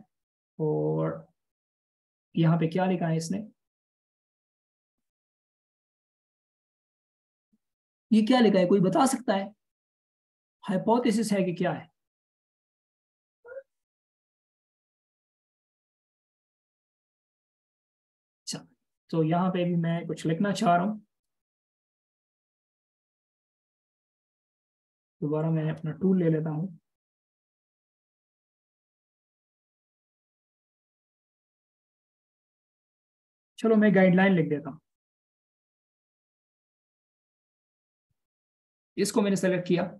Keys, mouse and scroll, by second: 0.3-2.5 scroll up 1, 2.5 double click, 8.4-9.0 alt+shift+scroll up 1, 9.5 alt+shift+scroll up 1, 11.6-12.0 alt+shift+scroll down 1, 12.8 alt+shift+scroll down 1, 13.2 alt+shift+scroll up 1, 17.7 double click, 20.7 space, 22.6-23.3 alt+shift+scroll down 1, 23.3 alt+shift+scroll up 1, 27.2 h, 28.8-30.3 typing, 31.4-31.8 BackSpace, 32.1 BackSpace, 32.8 ctrl+a, 33.8-37.1 typing.